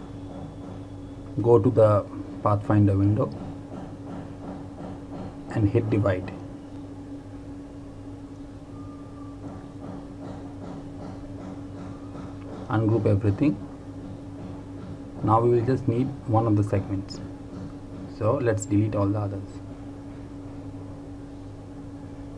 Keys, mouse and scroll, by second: 0.5 ctrl+a, 5.8 click, 10.7 right click, 11.9 click.